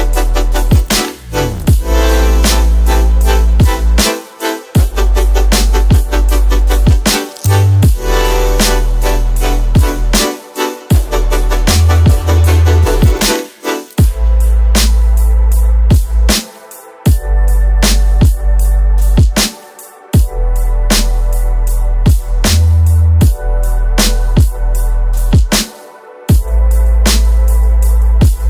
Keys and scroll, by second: 7.3 space, 15.6 alt+KP_Decimal, 17.1 j, 19.6 space, 26.4 space.